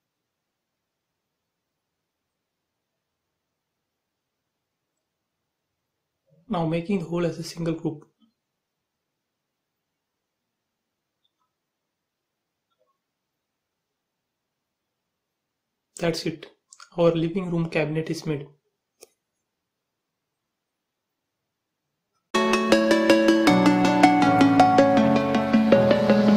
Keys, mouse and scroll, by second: 2.6 space, 3.0 click, 3.3 scroll down 1, 4.4 middle click, 4.9 scroll down 1, 6.9 click, 7.7 right click, 8.9 click, 9.6 middle click, 10.7 m, 10.8 click, 11.9 Left, 13.1 click, 14.8 Right, 15.5 click, 15.7 space, 15.9 click, 16.3 middle click, 16.9 scroll up 1, 17.2 shift+middle click, 17.8 scroll down 1, 18.2 shift+middle click, 18.8 scroll up 1.